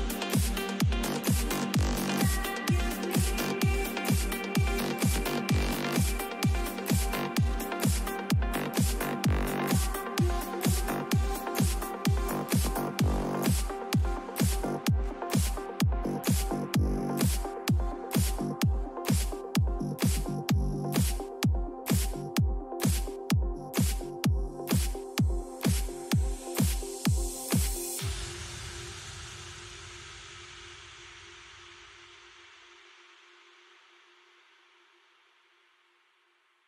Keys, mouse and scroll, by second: 0.7 b, 2.4 g, 3.9 a, 5.0 b, 6.9 g, 8.8 a, 12.6-14.8 middle drag, 14.8 ctrl+r, 16.2 a, 17.5 b, 18.9 g, 21.3 a, 22.3 b, 23.7 g, 25.3 a, 25.6-27.2 middle drag, 28.5 ctrl+r, 29.7 a, 30.8 b, 32.2 g, 33.8 a, 35.0 b, 36.5 g.